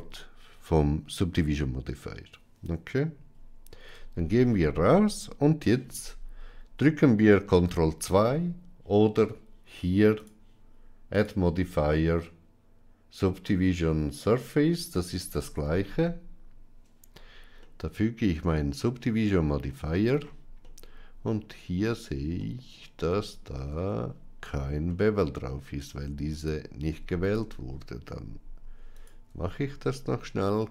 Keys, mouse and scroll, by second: 3.8 Tab, 11.0-14.5 drag, 15.4 ctrl+2, 17.6-19.5 middle drag, 20.5-21.3 middle drag, 22.3-22.7 middle drag, 22.9 Tab, 23.6 Tab, 24.8 middle click, 26.3 click, 27.1 alt+click, 28.9 alt+shift+click, 30.2 ctrl+b.